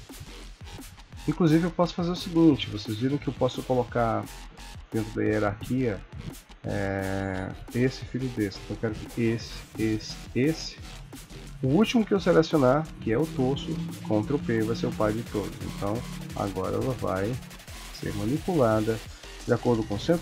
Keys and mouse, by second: 1.8 click, 7.6 click, 8.1 click, 9.6 shift+click, 10.1 shift+click, 13.9 ctrl+p, 15.7 click, 16.1 r, 17.5 click, 17.8 r.